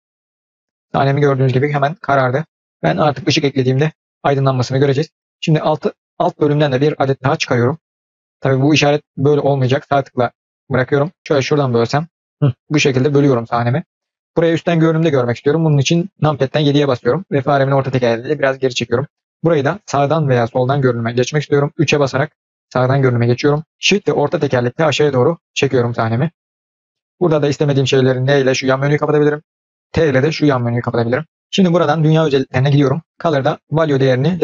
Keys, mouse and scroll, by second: 0.0-0.8 drag, 13.1-16.3 drag, 16.3 KP_7, 16.9-17.2 scroll down 2, 21.8 KP_3, 30.7 t, 32.3 click, 33.0 click.